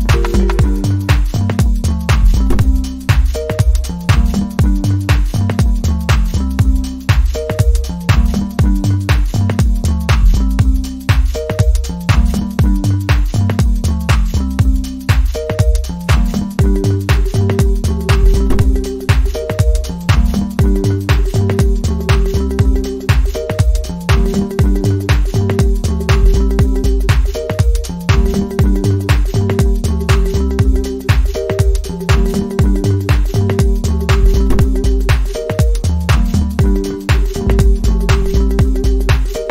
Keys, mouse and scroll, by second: 12.4 right click, 14.9 right click, 21.5 ctrl+t.